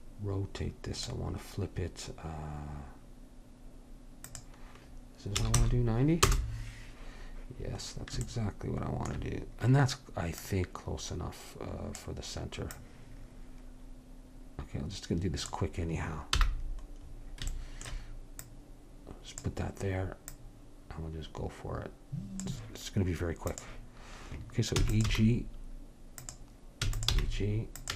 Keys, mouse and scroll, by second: 10.4-14.6 drag, 16.5 n, 18.5-22.2 drag, 23.6-25.0 drag, 24.8 e, 25.1 g, 26.8 e, 27.2 g.